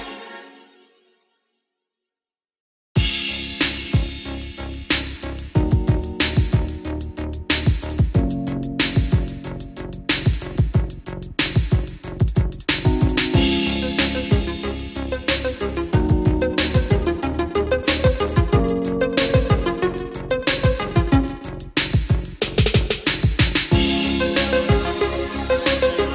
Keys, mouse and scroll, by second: 10.2 KP_5, 11.7 click, 14.4 scroll down 1, 15.1-15.8 scroll up 1, 18.7-22.2 drag, 22.6 KP_1, 24.6 click, 25.8 KP_5.